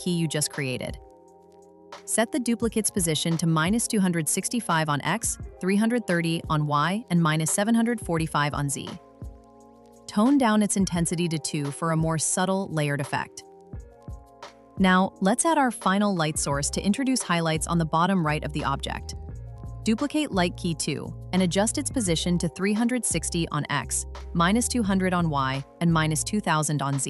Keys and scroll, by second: 4.8 Return, 9.0 Return, 12.3 Return.